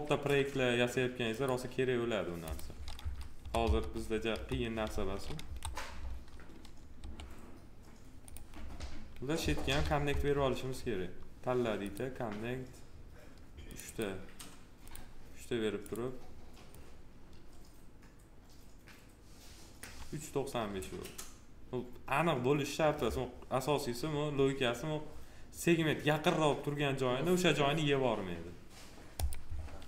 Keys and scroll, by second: 2.9 F3, 6.9 2, 9.6 alt+r.